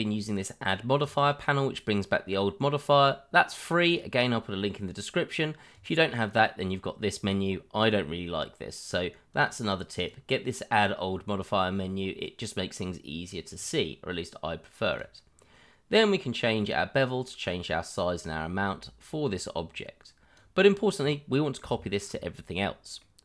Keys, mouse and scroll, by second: 1.0 click, 5.7 click, 8.9 click, 9.4 double click, 9.9 click, 13.5 click, 15.4-16.6 scroll down 1, 16.6 click, 20.6-21.0 scroll down 1, 21.3 middle click, 21.8 shift+middle click, 21.8 middle click, 22.0 shift+middle click, 23.0 middle click.